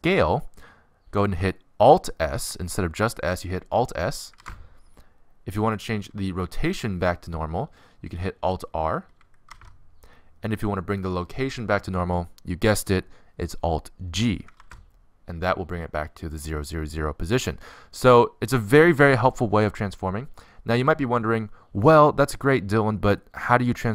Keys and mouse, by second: 4.8 alt+s, 9.4 alt+r, 15.0 alt+g.